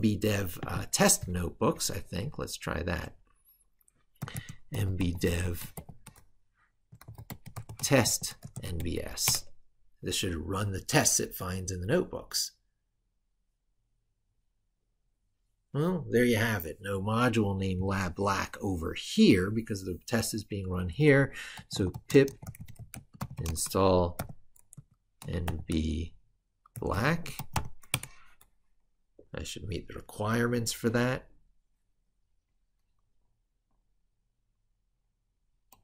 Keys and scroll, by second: 1.8 ctrl+super+Right.